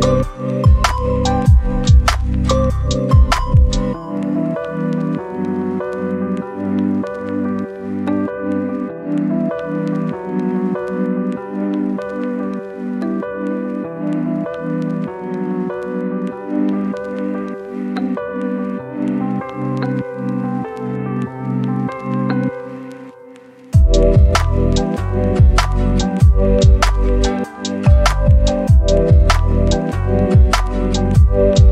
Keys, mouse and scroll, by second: 0.4-2.6 right drag, 2.6-3.9 scroll up 1, 3.9 click, 4.8 scroll up 1, 5.0 click, 9.0 scroll down 1, 9.2 right click, 9.8 scroll down 1, 9.9 scroll up 1, 10.0 right click, 10.5 scroll up 1, 10.7 click, 15.0 scroll down 1, 15.2-16.5 right drag, 16.5 scroll down 1, 16.6 scroll up 1, 16.8 right click, 17.7 scroll up 1, 17.9 right click, 18.2 scroll down 1, 18.3 scroll up 1, 18.4 right click, 18.9 scroll down 1, 19.0-19.5 scroll up 2, 19.1 right click, 19.5 right click, 20.7 click, 20.7 right click, 20.9 right click, 21.4-21.7 scroll down 1, 21.7-23.0 scroll up 1, 23.0-24.4 scroll down 1, 24.4 right click, 24.5 click, 24.6-25.9 right drag, 25.9 click, 26.6 right click, 27.0 scroll up 1, 27.3 click, 28.1-28.7 scroll down 1, 28.7 right click, 30.8 click.